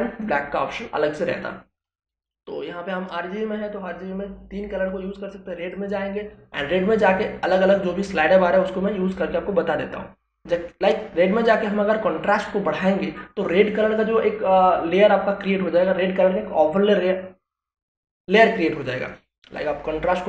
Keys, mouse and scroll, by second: 4.8 click, 18.8-20.2 drag.